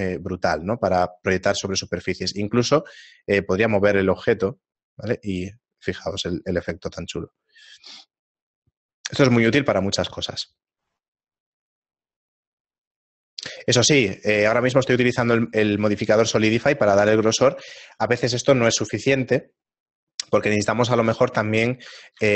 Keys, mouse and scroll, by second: 1.7 right click, 2.9 g, 16.0 shift+middle click, 20.6 shift+middle click, 21.3 Tab, 21.3-22.3 scroll up 2.